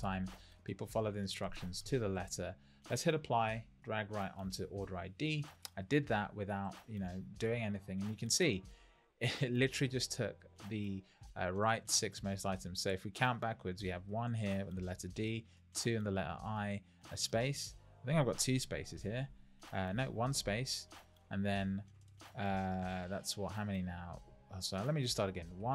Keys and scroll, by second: 19.2 Left, 19.9 Right, 20.3 Left, 23.7 Right, 25.6 Left.